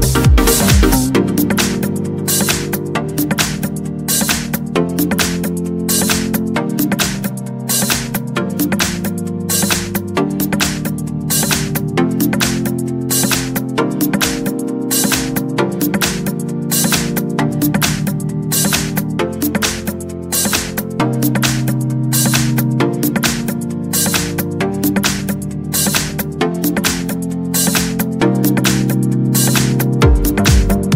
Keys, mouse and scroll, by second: 1.3 click, 2.3 click, 4.2 click, 4.9 click, 6.3 click, 7.2 click, 7.8 click, 8.9 1, 9.4 2, 10.8 click, 11.9 click, 13.0 click, 15.2 9, 15.6 0, 16.8-21.7 drag, 22.4 1, 25.3 1, 26.7-29.3 drag, 29.5 click.